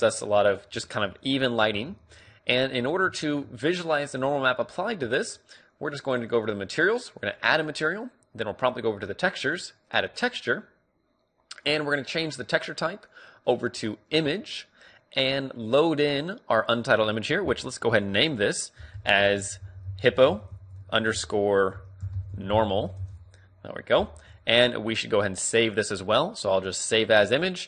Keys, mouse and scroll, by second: 0.1-1.9 drag, 1.4-5.7 middle drag, 8.0-12.1 drag, 13.3-23.8 drag.